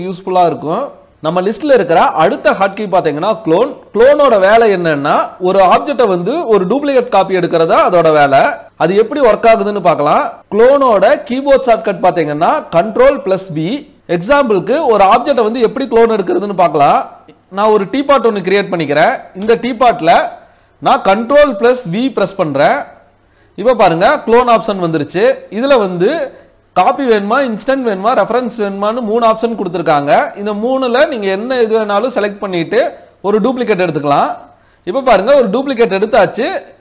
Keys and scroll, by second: 12.5 ctrl+v.